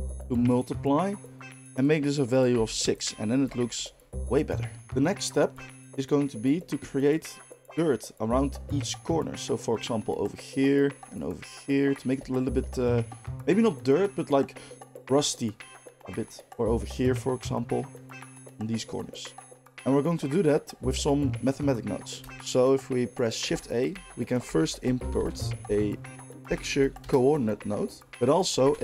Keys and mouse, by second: 2.9-18.1 middle drag, 23.4 shift+a, 28.1 shift+a.